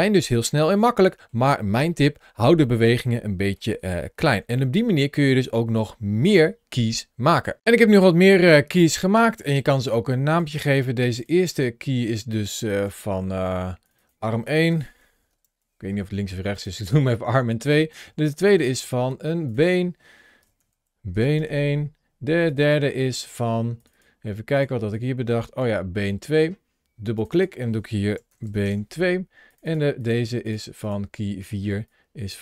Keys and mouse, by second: 0.1-1.2 middle drag, 2.6 middle click, 3.9 shift+middle click, 4.6 middle click, 10.3 click, 11.4 click, 12.1 click, 13.8-16.4 drag, 16.8 click, 17.8 click, 19.3 click, 19.5-22.3 drag, 20.5 e, 22.4 click, 23.6 click, 24.7-25.4 drag, 27.0 click, 27.4-29.3 drag, 28.3 e, 29.5 click, 30.7 click, 31.7 click.